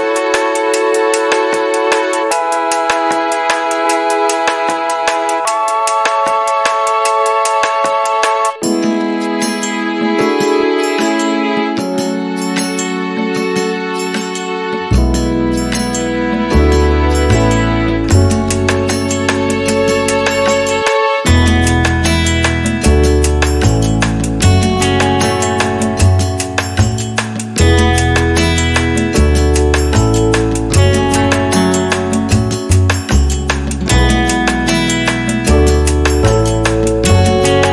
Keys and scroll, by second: 3.2 m, 6.4 3, 6.8 Return, 11.0 r, 13.5 space, 16.8 f, 18.1 5, 18.5 Return, 19.2 space, 20.9 p, 21.9 3, 22.3 Return, 23.7 1, 24.0 KP_Decimal, 24.2 5, 24.6 Return, 26.1 b, 28.4 space, 31.8 m, 36.8 space.